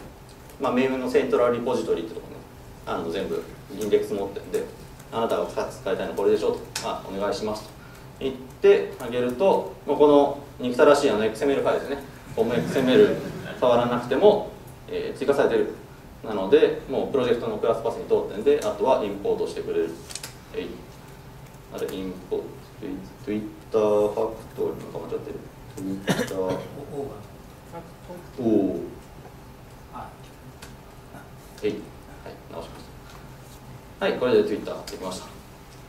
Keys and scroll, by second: 18.7 alt+Return, 30.8 ctrl+space, 31.6 Tab.